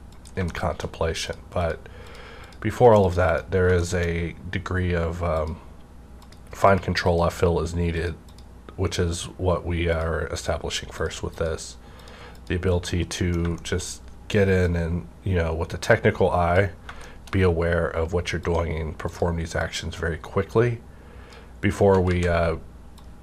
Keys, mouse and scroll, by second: 0.5 shift+middle click, 1.2 click, 1.6 click, 3.6 scroll down 1, 3.8 shift+middle click, 4.1 scroll up 1, 5.4 click, 6.2 click, 12.9 middle click, 13.6 shift+middle click, 13.9 scroll up 1, 14.6-17.4 drag, 17.0 shift+middle click, 17.4 scroll down 1, 18.4 click, 19.1-23.2 drag, 22.1 ctrl+z.